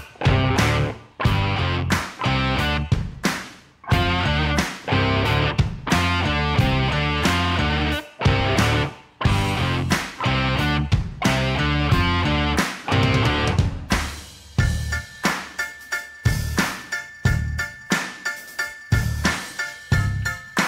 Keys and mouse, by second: 0.4-0.7 middle drag, 1.7 Tab, 2.0-2.7 middle drag, 3.2 middle drag, 3.8 shift+click, 4.0-4.4 middle drag, 4.9 Tab, 5.4 ctrl+a, 6.6 Tab, 7.2 i, 11.3-12.2 drag, 12.4-13.3 middle drag, 14.1 3, 14.8 alt+click, 15.7-16.5 middle drag, 16.9-17.3 middle drag, 17.5 a, 17.7-18.2 middle drag, 18.4 g, 18.5 z, 19.8 shift+middle click.